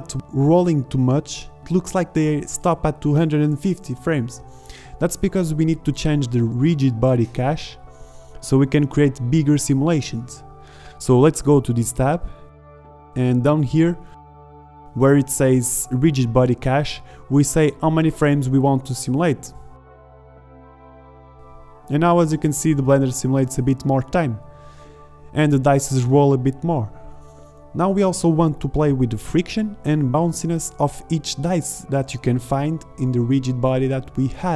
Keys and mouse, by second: 3.0 alt+a, 3.7 click, 5.2 g, 8.2 g, 12.7-14.4 drag, 14.4-14.9 right drag, 16.9-18.9 drag, 19.5-20.4 middle drag, 20.4-22.4 drag, 21.8 KP_0, 24.4 shift+Left, 24.9 alt+a.